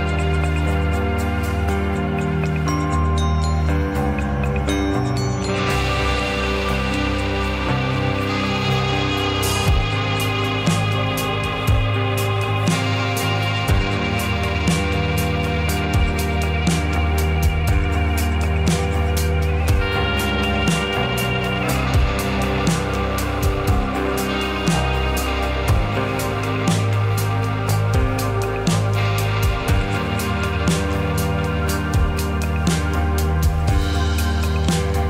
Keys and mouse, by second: 2.5-3.1 middle drag, 3.6 shift+middle click, 4.2 shift+middle click, 4.9 shift+middle drag, 5.4 middle click, 5.8-6.2 shift+middle drag, 7.1 middle click, 8.9 middle click, 9.3-10.0 shift+middle drag, 11.5 ctrl+r, 13.1 ctrl+r, 18.1 s, 19.4 e, 21.7 shift+middle click, 22.0 middle click, 23.4 shift+a, 29.0 ctrl+z, 30.5 shift+s.